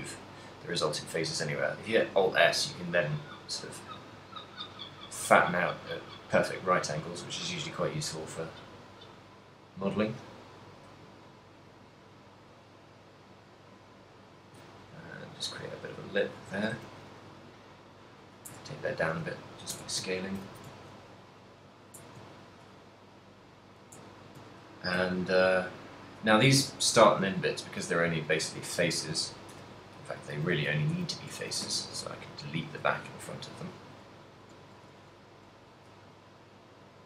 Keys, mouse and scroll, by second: 16.4 shift+click, 16.7 s, 18.6 click, 18.8 Tab, 18.8 middle click, 19.4 a, 19.8 Tab, 20.2 ctrl+middle click, 20.6 a, 21.4 middle click, 22.1 Tab, 22.5 shift+middle click, 23.7 right click, 24.1 Tab, 24.5 z, 25.2 z, 25.7 middle click, 27.7 middle click, 28.5 z, 29.6-31.8 typing, 33.3 shift+middle click, 33.8 n, 34.6 n, 35.0 b.